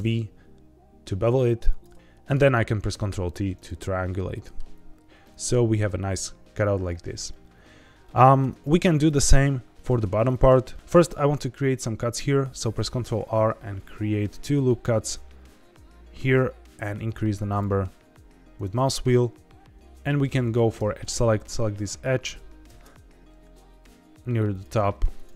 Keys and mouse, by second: 1.6 click, 1.9 middle click, 2.9 ctrl+t, 3.5 right click, 4.3 middle click, 5.2-6.5 middle drag, 7.3 middle click, 8.4 Tab, 9.0 click, 9.7 middle click, 10.1 Tab, 10.7 middle click, 10.7 ctrl+r, 12.9 ctrl+r, 18.5 right click, 20.7 2, 21.4 click, 22.6 ctrl+b, 24.5 click, 24.9 1, 25.1 click.